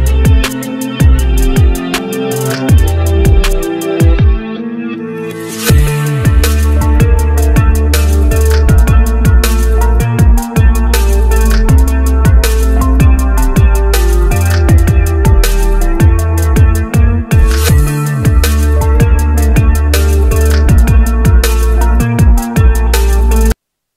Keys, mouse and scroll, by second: 3.5 F4, 6.0-6.9 scroll down 1, 6.9 scroll down 1, 6.9 scroll up 1, 8.0-8.8 scroll down 1, 10.1 F4.